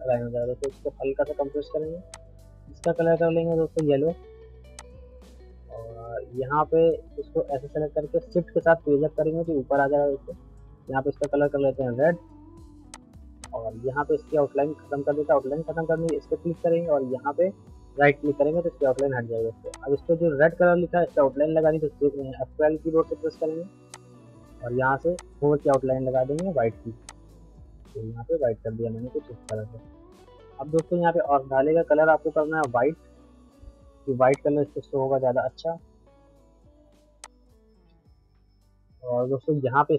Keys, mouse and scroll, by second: 0.6-9.3 shift+drag, 9.3 shift+Page_Up, 11.2 click, 16.1 click, 18.9 click, 22.7 F12, 23.9 click, 28.4 right click, 29.5 shift+click, 29.6-30.4 typing, 30.2 middle click, 30.8 click, 30.8 click, 33.4 middle click, 34.3 click, 34.8 middle click, 37.2 click, 37.2 click, 37.9-38.7 scroll down 1, 38.9 middle click.